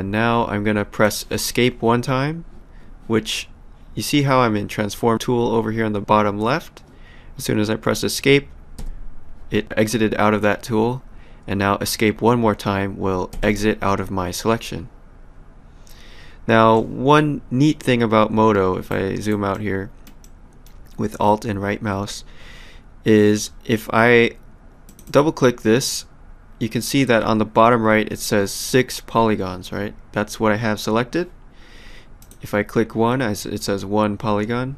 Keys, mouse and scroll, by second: 8.8 Escape, 13.3 Escape, 18.9 alt+right click, 19.5 alt+middle click, 24.9 click, 32.2 click.